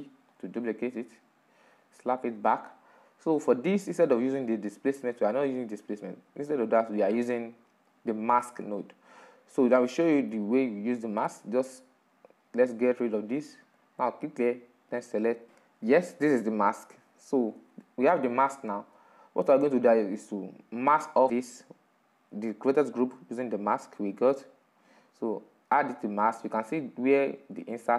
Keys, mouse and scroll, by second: 11.5-17.1 drag, 18.3-25.6 middle drag, 25.6 click, 26.5 middle click, 27.2-27.9 scroll up 4.